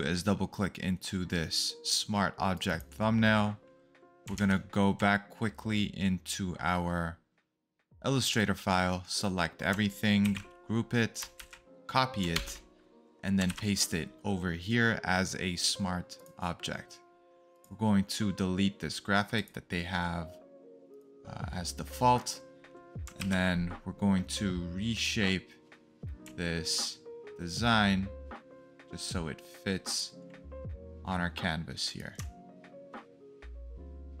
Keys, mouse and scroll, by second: 2.6 alt+Tab, 2.6 d, 3.1 double click, 4.3 click, 4.9 alt+Tab, 10.2 ctrl+g, 11.3 ctrl+c, 12.3 alt+Tab, 13.4 ctrl+v, 23.4 ctrl+t, 31.1-32.1 scroll down 2.